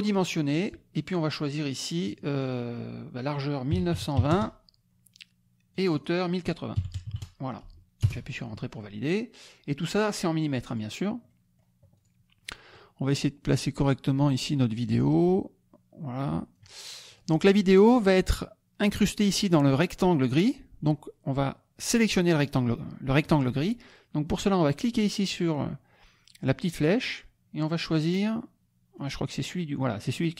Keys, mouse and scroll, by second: 2.1 click, 3.9 KP_9, 4.3 KP_0, 5.7 click, 6.7 KP_1, 6.9 KP_0, 7.0 KP_8, 8.0 Return, 10.6 click, 11.2 middle click, 12.0 click, 12.4 middle click, 13.1-16.7 drag, 17.0 click, 22.4 click, 26.7 click, 27.7 click, 28.9-30.3 drag.